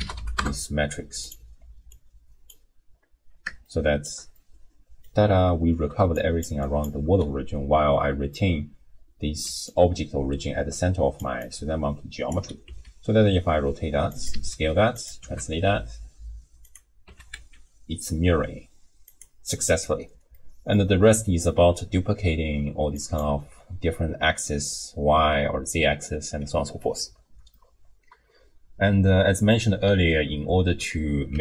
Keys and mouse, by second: 1.9-2.5 drag, 3.7-4.1 shift+middle drag, 4.5 middle click, 5.9 d, 6.1 click, 6.5 d, 6.6 click, 6.6-7.1 d, 9.5-11.4 d, 9.7-11.2 drag, 11.5 right click, 12.3 d, 12.7 d, 12.7 r, 14.3 s, 15.2 g, 17.1 r, 20.3 click, 23.0 click, 27.5-29.6 drag, 31.3 g.